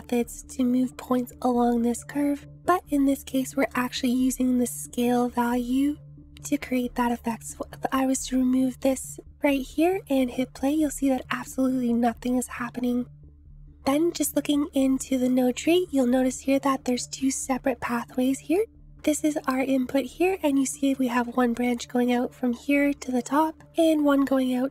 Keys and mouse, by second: 3.8 middle click, 5.3 click, 7.1-8.9 drag, 10.0 space, 15.2 click, 19.0 ctrl+z, 19.0 click, 21.2-23.5 drag.